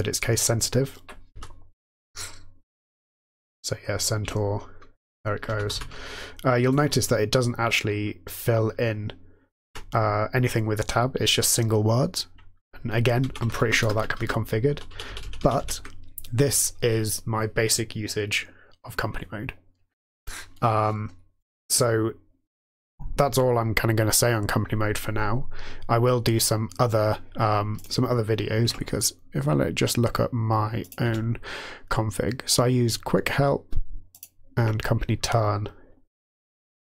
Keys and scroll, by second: 1.4 n, 4.2 Tab, 5.2-6.2 typing, 9.7 typing, 13.2 ctrl+a, 13.7 BackSpace, 13.9 BackSpace, 14.2 BackSpace, 14.7 Down, 14.9 Down, 15.1 Down, 15.2 Down, 28.8 Tab, 31.0 Tab, 34.6 Tab.